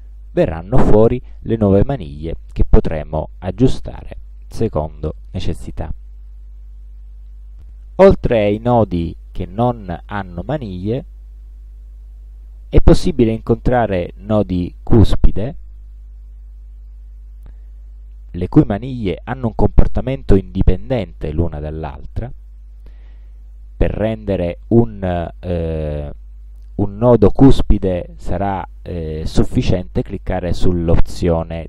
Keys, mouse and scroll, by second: 2.9 click, 4.4 click, 16.0 click, 17.9 click, 19.9 click, 24.1 click, 27.4-29.7 drag.